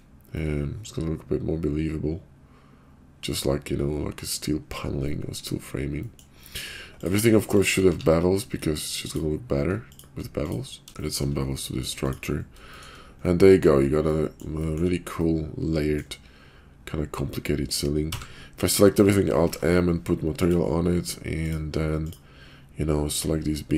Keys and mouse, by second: 0.3-4.4 middle drag, 5.1 middle click, 6.0 middle click, 7.4 shift+click, 7.8 q, 10.4 click, 11.0 shift+drag, 11.0 shift+q, 12.6 shift+middle click, 13.2-13.6 middle drag, 14.0 middle click, 14.6 shift+middle drag, 15.1-16.0 middle drag, 18.0 a, 19.4 alt+m, 21.4 click, 21.9 click.